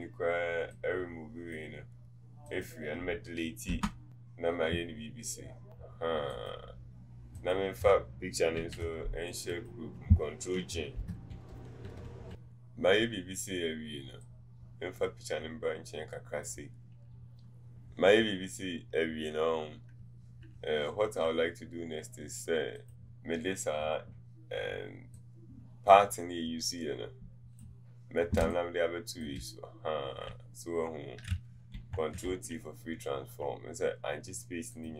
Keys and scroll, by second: 3.8 Delete, 28.5 space, 32.5 ctrl+alt+t.